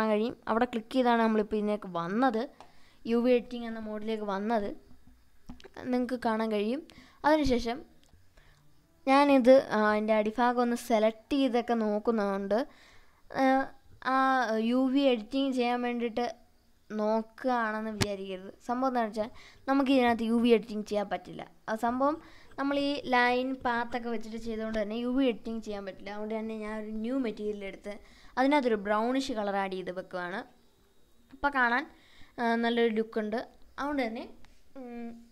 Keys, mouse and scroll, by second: 0.0-1.3 drag, 2.7 Tab, 4.5 a, 6.5 u, 9.6 u, 9.9 u, 10.1 u, 10.5 u, 11.5 Tab, 11.9-12.4 scroll down 2, 12.4-13.1 scroll up 1, 13.1-14.0 drag, 14.1-15.0 scroll up 2, 15.0-16.0 middle drag, 18.3 click, 20.0 click, 21.7 click, 29.5 scroll down 2, 30.2-30.9 scroll down 3, 30.9-35.3 middle drag.